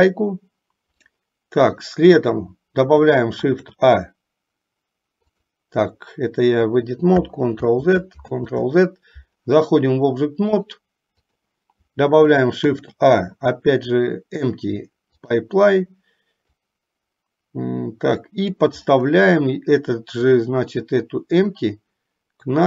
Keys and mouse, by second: 3.6 shift+a, 5.5 click, 7.7 ctrl+z, 8.3 ctrl+z, 10.8 click, 12.7 shift+a, 16.7-18.8 drag, 20.5-22.6 drag.